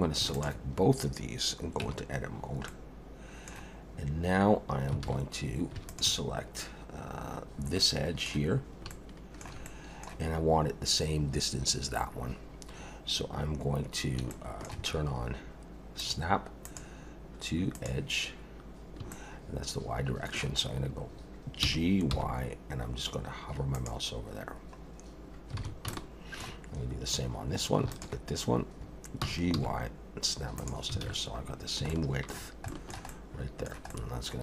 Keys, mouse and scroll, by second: 0.3 shift+click, 1.8 Tab, 2.7 middle click, 5.0 alt+a, 5.9 alt+shift+click, 7.8 middle click, 8.6 scroll up 2, 8.9 shift+middle click, 9.6 middle click, 14.3 shift+middle click, 16.0 click, 16.6 click, 19.1 shift+middle click, 20.6 scroll up 1, 21.6 g, 24.5 scroll down 1, 25.6 alt+a, 25.9 shift+middle click, 27.9 alt+shift+click, 29.2 g, 31.0 alt+a, 31.4-31.8 scroll down 4, 31.9 shift+middle click, 32.8 shift+middle click, 33.1 middle click, 33.9 middle click.